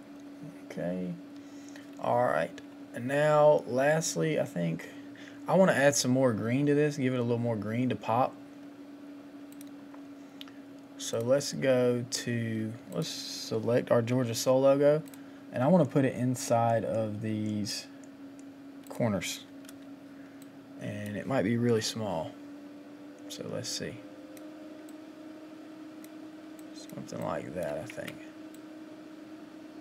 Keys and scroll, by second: 27.9 Return.